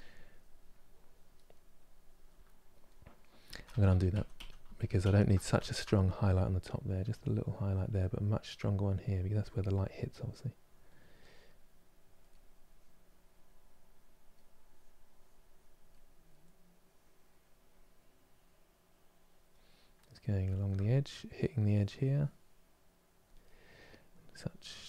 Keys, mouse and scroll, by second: 2.1-3.2 middle drag, 3.2 ctrl+z, 3.4 ctrl+z, 3.6 ctrl+z, 3.8 ctrl+z, 4.0 ctrl+z, 4.3 ctrl+z, 4.7 ctrl+z, 5.3 ctrl+z, 6.4-12.0 drag, 12.0 middle click, 12.4-15.6 drag, 15.6 middle click, 16.3-19.4 drag, 19.4-21.1 middle drag, 21.1-23.1 drag, 23.1 middle click, 24.0 click.